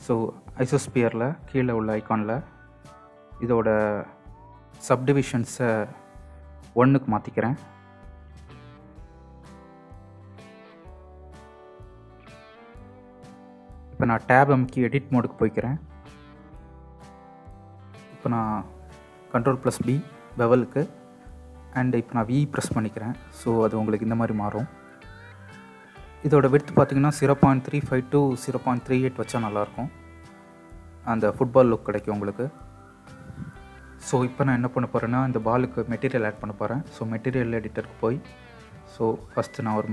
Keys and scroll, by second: 14.9 Tab, 19.0 ctrl+b, 22.3 v.